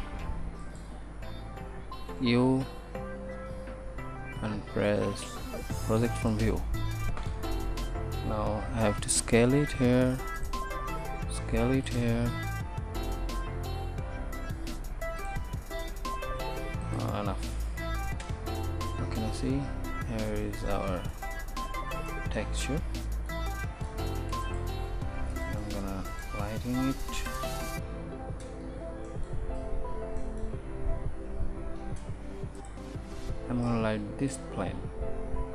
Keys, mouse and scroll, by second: 2.2 u, 9.2 s, 10.7 s, 14.4 g, 15.6 s, 18.4 Tab, 19.1 shift+z, 20.6-23.0 middle drag, 23.5 middle click, 23.8 middle click, 23.8 shift+z, 24.2 shift+z, 24.2 ctrl+s, 27.3 Delete, 31.8 shift+a.